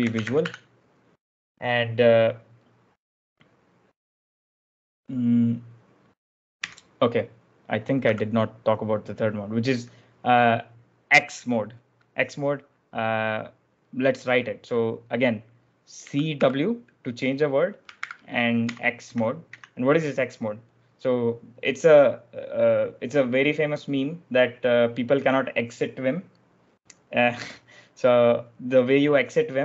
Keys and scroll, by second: 0.0-0.9 typing, 6.5 j, 7.9 b, 15.7-16.7 typing, 17.9-19.5 typing.